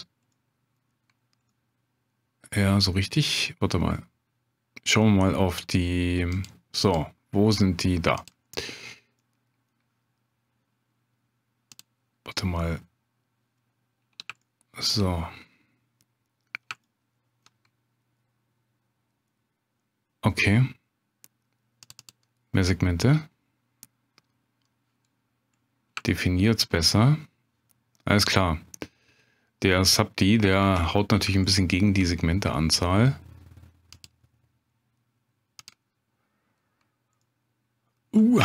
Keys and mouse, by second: 0.3-0.8 middle drag, 1.5-2.6 middle drag, 6.3-6.7 drag, 6.7 Tab, 6.9-8.5 drag, 9.2 middle click, 11.8-13.8 drag, 14.4-15.0 shift+drag, 16.8-17.4 shift+drag, 23.0 click, 26.1-26.6 shift+drag, 30.6 Tab, 31.5 shift+click, 33.9-35.9 drag, 37.2 middle click.